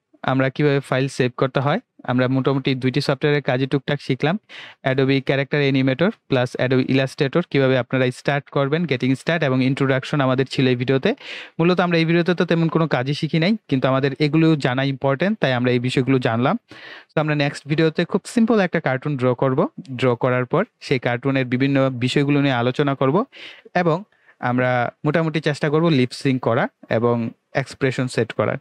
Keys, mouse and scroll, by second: 3.2 click, 6.1 click.